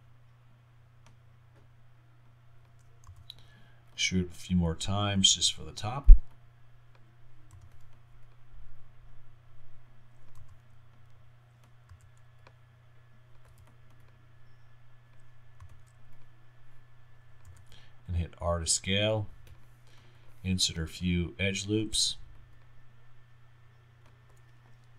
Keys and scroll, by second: 3.1 g, 6.0 r, 7.6 g, 8.2 g, 10.4 g, 13.5 w, 15.6 g, 22.0 r.